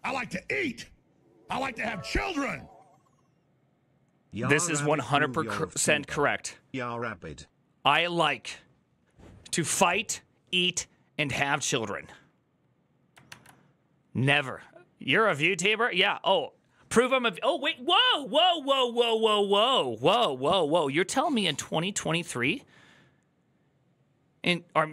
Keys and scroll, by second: 13.2 alt++, 13.7 alt++.